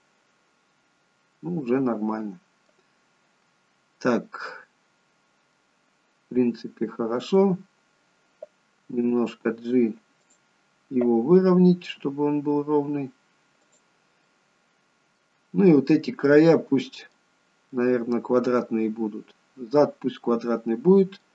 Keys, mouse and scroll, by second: 5.6 middle click, 9.0 g, 14.3 middle click, 15.9 middle click, 20.3 middle click.